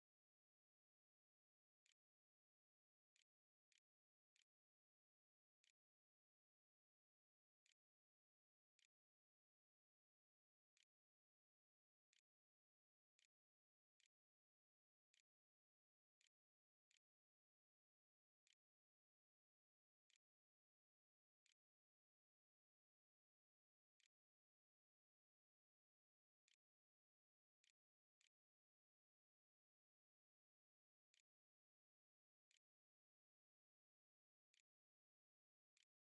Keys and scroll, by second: 0.6-12.3 typing, 10.6 Tab, 12.6 Return, 13.3 shift+Up, 13.6 shift+', 14.7 l, 15.7-21.9 typing, 20.4 Delete, 20.7 Return, 23.0 ', 23.5 Return, 24.2 ', 25.3-27.9 typing, 29.0 q, 29.8 a, 30.9 s, 31.5 a, 32.3 Tab, 32.7-36.0 typing.